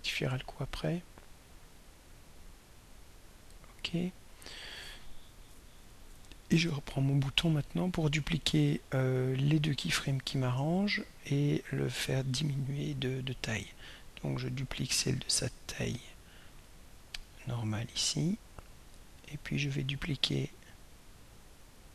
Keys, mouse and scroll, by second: 0.7 click, 3.3 click, 6.7 click, 13.1 right click, 14.6 click, 17.0-18.8 drag, 19.8 right click.